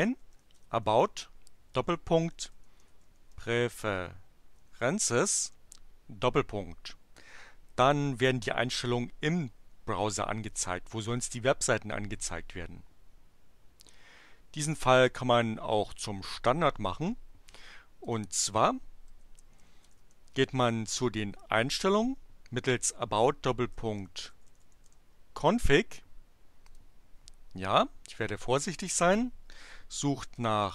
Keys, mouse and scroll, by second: 0.0-5.7 typing, 18.0 click, 18.9-20.5 typing, 21.6 shift+., 23.5-25.1 typing, 26.7 click, 30.1-30.7 typing.